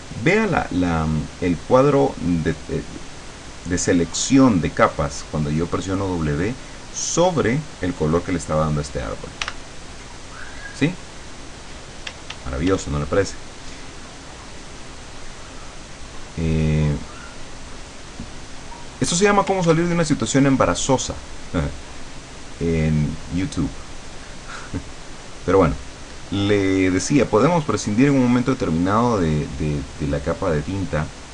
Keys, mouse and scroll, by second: 9.5 w, 12.1 d, 13.2-18.4 drag, 18.6 click, 19.7 ctrl+z, 20.1-23.8 ctrl+drag, 24.5-31.3 drag.